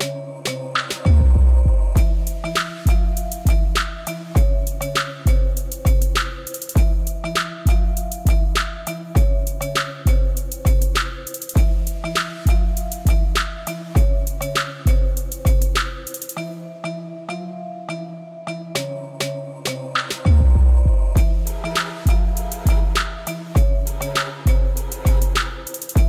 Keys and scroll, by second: 1.2 alt+a, 1.9 shift+z, 2.8 b, 5.1 x, 9.6 shift+z, 13.8 i, 22.9 7, 24.3 shift+z, 25.3 alt+a.